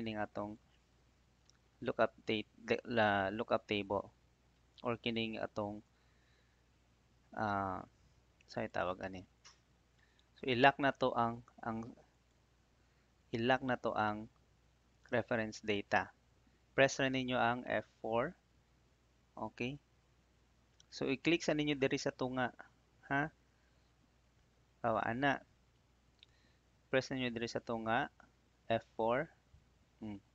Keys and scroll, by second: 18.2 F4, 23.3 F4, 29.2 F4.